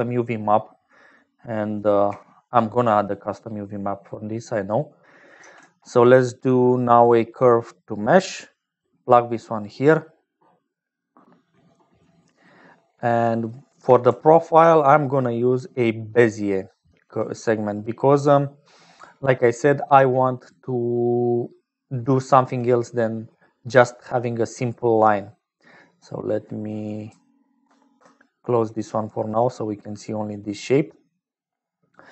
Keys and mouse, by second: 0.2 click, 3.0 click, 5.2 click, 5.5 shift+a, 13.3 click, 14.0 shift+a, 18.5 click, 19.7 click, 21.0-22.6 drag, 23.6 click, 24.2 middle click, 26.3 click, 27.7 ctrl+alt+click, 28.9 shift+click, 29.5 click, 30.6 click, 32.0 click.